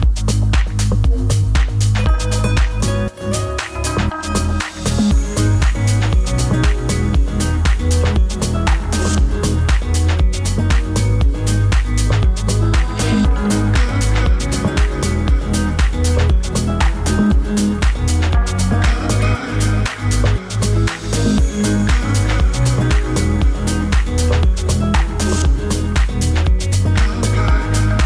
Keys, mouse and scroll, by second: 10.4 0, 10.7 Return, 12.2-28.0 drag, 17.8 typing.